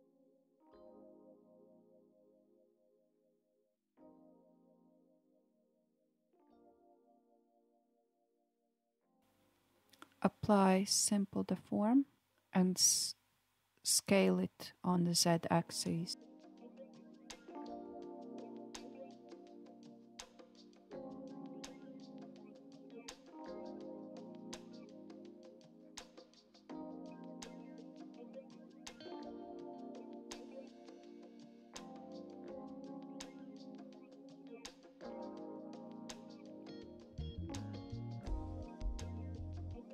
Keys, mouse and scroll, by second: 2.1-3.1 drag, 3.1-5.5 middle drag, 5.5 Tab, 6.0 s, 9.2 Tab, 9.6-12.6 drag, 13.4-15.9 drag, 15.9 ctrl+z, 17.1 click, 18.5 Tab, 19.8 click, 21.9 s, 29.0 click, 31.7 click, 32.2 click, 32.8 click, 34.9 KP_1, 37.9 g.